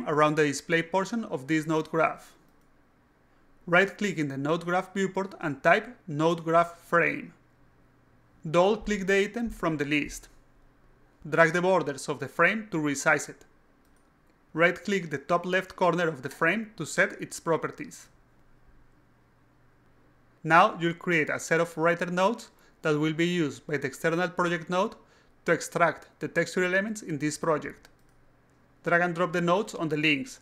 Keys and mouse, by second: 5.1 right click, 5.8-6.8 typing, 8.8 click, 8.9 click, 9.8 click, 11.1-12.3 drag, 13.0-14.1 drag, 14.5 right click, 14.8 click, 14.9-16.1 typing, 16.1 drag, 16.8 click, 17.6 click, 18.0 click, 18.5 click, 19.5 click, 28.3 click, 28.8 click, 29.9 click.